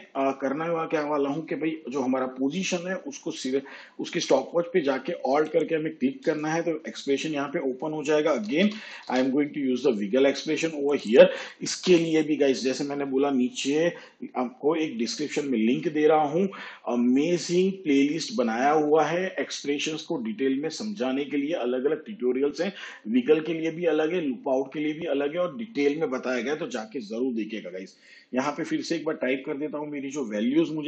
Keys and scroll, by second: 8.3-9.0 typing.